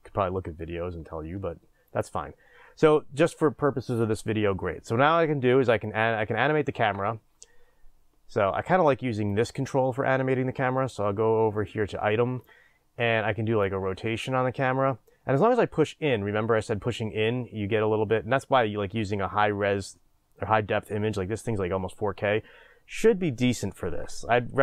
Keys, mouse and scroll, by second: 1.8 click, 9.3-24.6 drag, 15.9-17.6 scroll up 3, 17.6-18.1 scroll down 3, 18.1 scroll up 2.